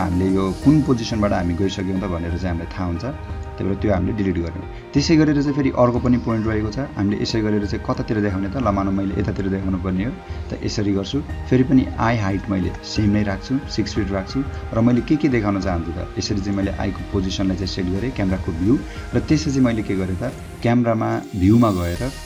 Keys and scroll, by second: 1.6 o, 4.0 space, 12.4 6, 12.7 ', 13.0 Return.